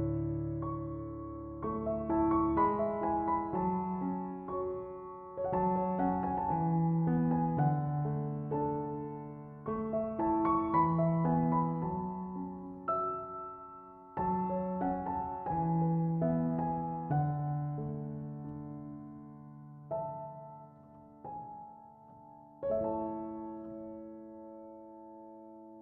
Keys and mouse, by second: 2.2 click, 10.2 click, 24.4 click.